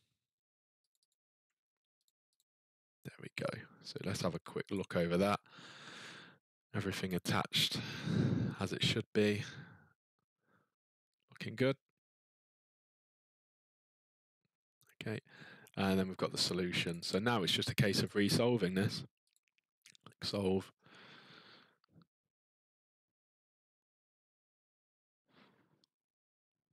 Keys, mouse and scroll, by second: 0.9 click, 1.1 click, 2.0 click, 2.4 click, 4.7 click, 6.7-9.0 scroll, 9.0-11.5 ctrl+middle click, 9.0-9.4 scroll, 14.6-15.1 scroll, 16.9 click, 18.0 click, 19.3 click.